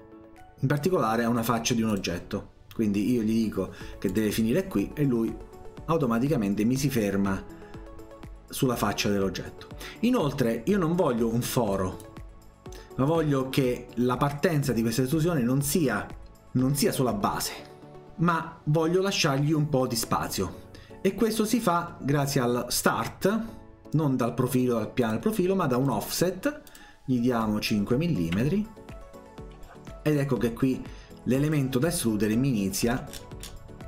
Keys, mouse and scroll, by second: 1.9 click, 4.1 click, 12.0-13.1 drag, 25.1 click, 25.9 click, 26.7 click, 27.4 click, 30.2-31.5 drag, 32.8-33.5 scroll down 2, 33.5 middle click.